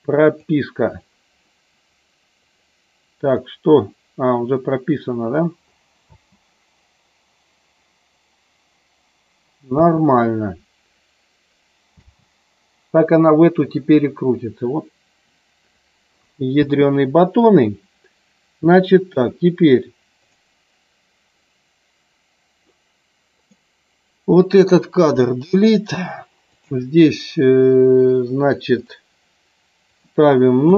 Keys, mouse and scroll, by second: 0.3 click, 2.4 click, 6.1 space, 9.7 space, 16.6 space, 20.2 click, 23.5 click, 26.4-28.8 drag, 29.8-30.7 drag.